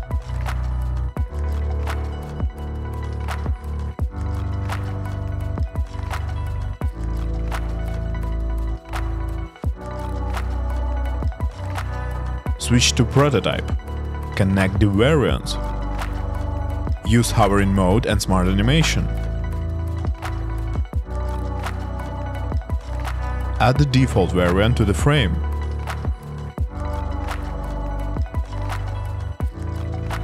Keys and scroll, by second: 1.0 shift+Up, 1.3 shift+Left, 1.6 shift+Up, 5.6 shift+Up, 7.1 shift+Down, 10.5 shift+Left, 10.9 shift+Up, 23.7 super+c, 27.8 super+v.